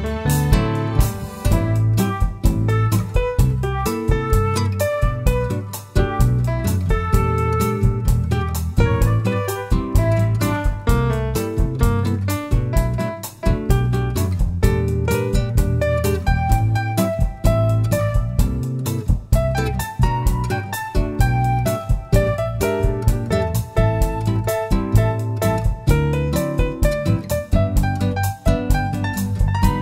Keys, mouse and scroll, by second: 1.2 shift+click, 1.9-4.9 middle drag, 2.6 ctrl+b, 4.9 click, 5.2-5.6 scroll down 1, 5.6 middle click, 6.4 click, 7.0 middle click, 8.1-8.4 scroll down 1, 8.6 Tab, 8.6-9.2 middle drag, 9.2 click, 9.5 scroll down 1, 9.8-12.7 middle drag, 10.6 `, 12.7 shift+a, 15.6 middle click, 15.8 scroll down 1, 16.3 s, 17.3 click, 17.5 scroll up 1, 18.0 g, 18.7 click, 19.0 s, 19.6 click, 20.0 g, 21.4 drag, 21.6 s, 22.9 click, 23.0 g, 23.7 click, 23.9-25.1 scroll up 2, 25.1 g, 27.0 click, 27.3 scroll down 1, 28.3 middle click, 28.5 s.